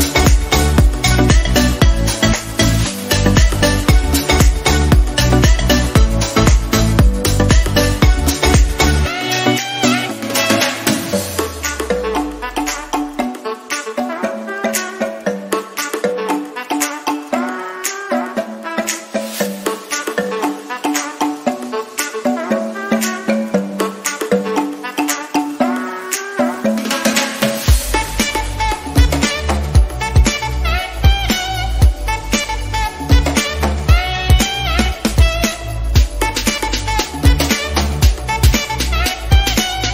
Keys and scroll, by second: 34.6 ctrl+g.